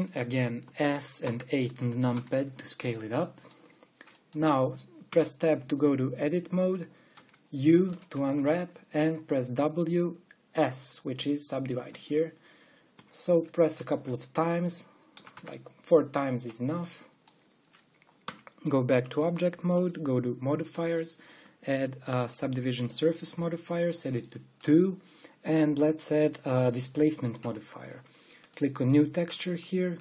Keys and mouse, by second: 1.2 s, 3.9 click, 5.9 Tab, 6.6 middle click, 7.8 u, 10.0 w, 14.3 w, 16.0 w, 17.4-19.0 middle drag, 19.0 Tab, 20.3-23.2 drag, 24.0-25.2 drag, 29.2-30.0 drag.